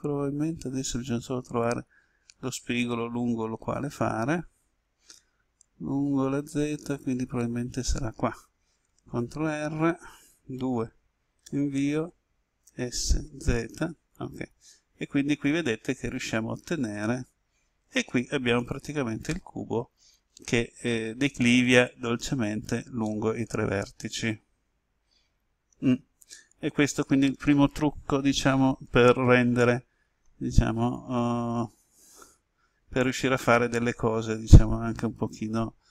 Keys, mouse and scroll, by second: 9.1 ctrl+r, 10.5 2, 11.3 Return, 12.7-13.2 typing, 18.5 click, 19.2-30.9 middle drag, 30.9 s.